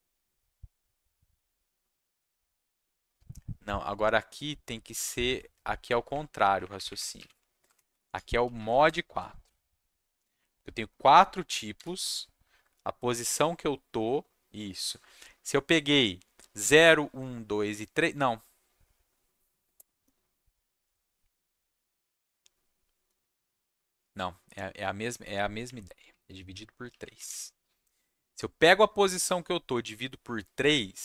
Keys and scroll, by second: 6.1 Up, 6.2 Up, 6.4 Up, 6.6 Up, 6.7 Up, 6.8 Up, 7.1 Left, 7.6 BackSpace, 7.9 4, 8.4 Left, 8.5 Left, 8.8 BackSpace, 11.7 shift+5, 25.0 alt+Left, 26.4 Right, 26.5 Right, 26.9 alt+Left, 27.2 3.